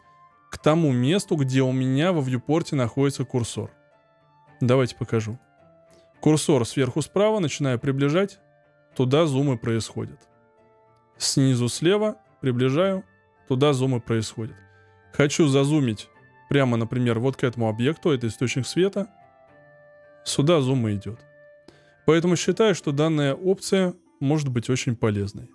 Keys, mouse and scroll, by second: 7.4-9.3 scroll up 5, 9.3-12.1 scroll down 6, 12.1-13.1 scroll up 3, 13.1-16.3 scroll down 4, 19.0-20.2 scroll up 5, 20.2-21.0 scroll down 7, 21.0-22.7 scroll up 1.